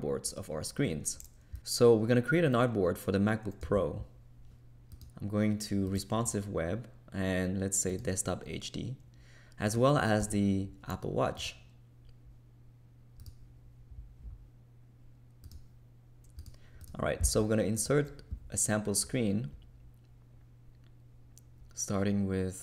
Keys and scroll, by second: 3.6 a, 10.2 a.